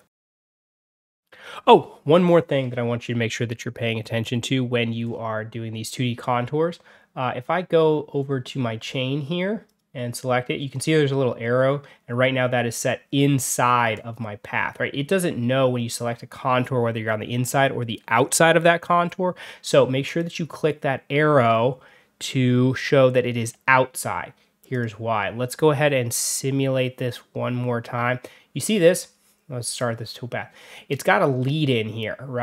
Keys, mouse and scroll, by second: 6.1 middle click, 6.3 middle click, 9.5 click, 14.2 ', 19.9 click, 24.6 click, 26.1 click, 29.5 click.